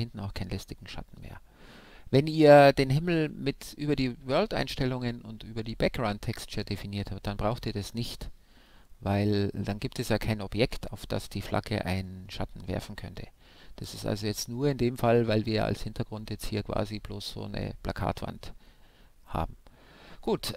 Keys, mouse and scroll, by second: 15.3-17.1 right drag.